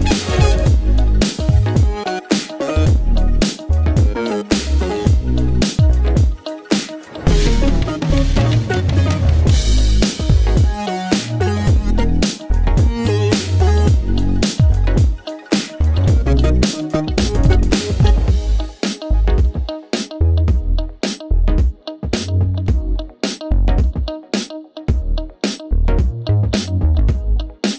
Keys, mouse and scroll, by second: 4.0 space, 6.1 space, 7.4-9.5 drag, 11.0 click, 12.1-16.3 drag, 16.5-24.1 drag, 24.1-27.7 drag.